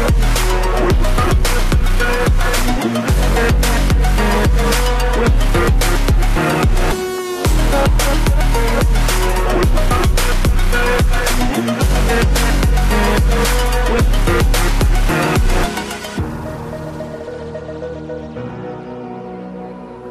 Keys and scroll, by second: 6.7 ctrl+t.